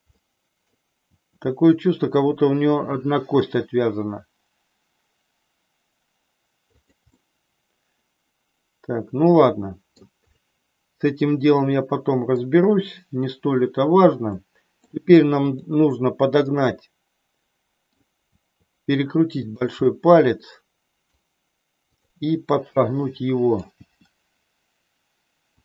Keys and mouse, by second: 0.2 middle click, 1.1 r, 6.8 click, 7.2-10.0 middle drag, 10.4-12.3 middle drag, 14.3 middle click, 15.4 click, 16.4-18.1 middle drag, 18.4 r, 20.0-21.1 middle drag, 22.8 middle click, 23.7 r.